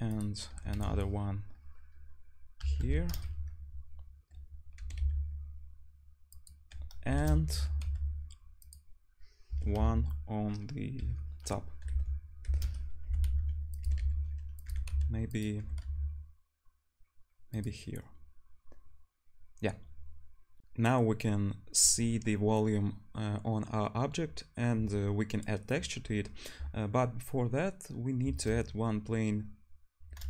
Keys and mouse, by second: 0.1 click, 0.1 middle click, 0.1-1.1 right drag, 0.5 r, 1.1-2.9 drag, 2.9-4.8 right drag, 4.8-18.7 drag, 4.8 g, 7.2 shift+d, 9.5 r, 13.1 g, 13.8 g, 14.7 g, 15.6 g, 20.6 ctrl+shift+F1, 28.2 shift+a.